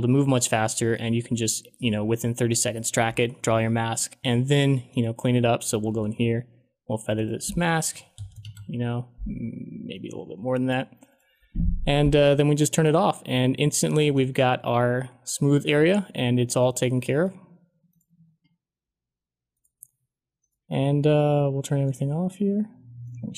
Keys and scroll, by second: 5.9 f, 7.8-8.7 typing.